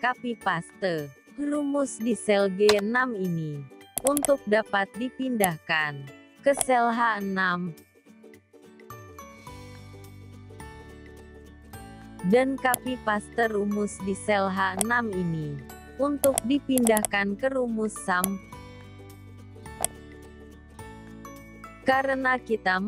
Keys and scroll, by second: 5.9 ctrl+v, 13.3 ctrl+c, 19.0 ctrl+v.